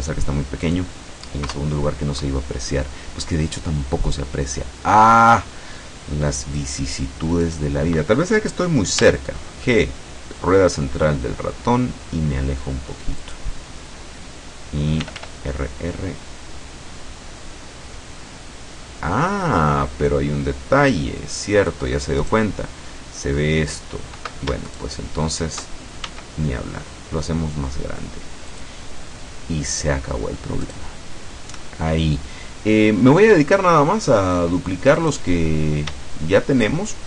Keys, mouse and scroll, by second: 0.7 click, 1.5 KP_0, 6.7 right click, 7.5 right click, 9.1 g, 9.8 click, 13.3 click, 15.1 r, 21.6 click, 22.3 right click, 24.7 shift+right click, 26.1 shift+s, 28.6 click, 30.7 right click, 35.1 right click.